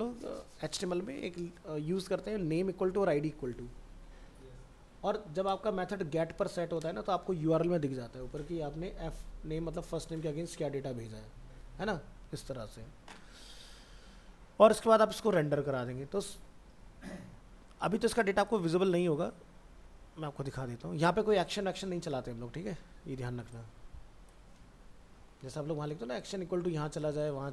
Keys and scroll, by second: 24.5 ctrl+c.